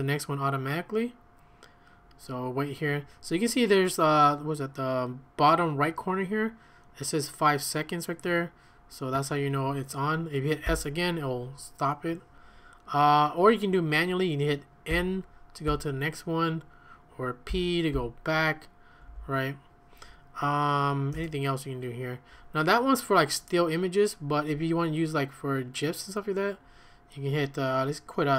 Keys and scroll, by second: 10.7 s, 14.9 n, 17.2-18.0 typing, 19.6-20.3 typing, 21.1 Return.